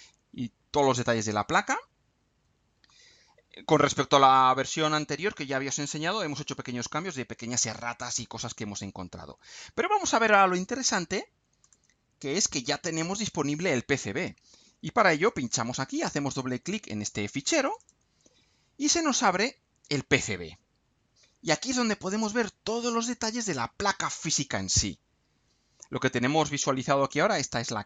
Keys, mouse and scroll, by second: 0.0-0.5 scroll up 1, 1.4 scroll down 2, 1.8-2.6 scroll up 2, 2.9-3.2 scroll down 2, 11.6-12.8 drag, 15.2 click, 17.6 click, 20.4 scroll down 2, 21.0 scroll up 2, 27.1-27.5 scroll down 2.